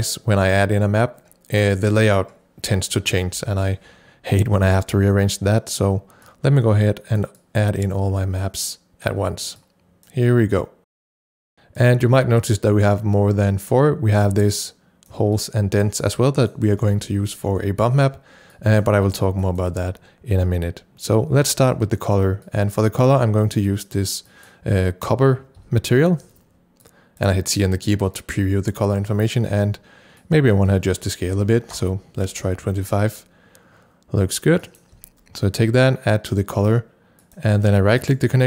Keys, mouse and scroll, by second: 6.4 click, 7.4-11.2 drag, 14.5-16.0 drag, 16.0-18.5 drag, 16.9 c, 19.1 c, 19.4 click, 21.4 click, 22.4-25.6 drag, 25.6 c, 26.8 click, 30.2 click, 31.3 KP_2, 31.8 KP_Enter, 34.6 click, 35.0 c, 35.6-38.4 drag, 38.0 right click.